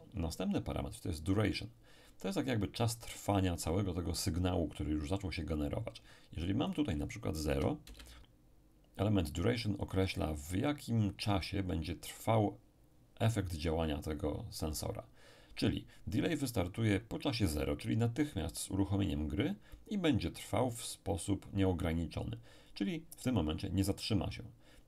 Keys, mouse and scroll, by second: 6.7 click, 7.5 0, 7.8 Return.